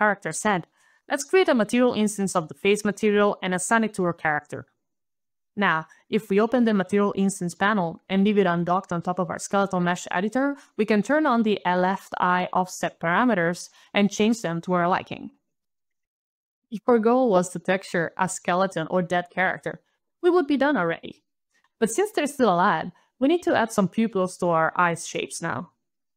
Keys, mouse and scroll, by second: 1.5 alt+click, 1.7 alt+shift+i, 1.8 alt+shift+-, 1.8 alt+shift+f, 1.9 alt+a, 1.9 alt+c, 2.0 alt+e, 2.1 alt+Return, 2.7 ctrl+alt+shift+s, 3.0 alt+click, 3.2 alt+click, 3.4 alt+click, 3.7 alt+shift+i, 3.8 alt+shift+-, 3.9 alt+shift+f, 4.0 alt+a, 4.0 alt+c, 4.0 alt+e, 4.3 alt+click, 5.1 alt+click, 5.3 alt+click, 6.8 alt+click, 8.3 alt+click, 8.9 alt+click, 9.2 alt+click, 9.8 alt+click, 10.9 alt+click, 10.9 alt+click, 11.5 alt+click, 13.8 alt+click, 14.7 alt+click, 15.8 alt+d, 15.9 alt+a, 15.9 alt+q, 15.9 alt+d, 16.0 alt+click, 16.2 alt+click.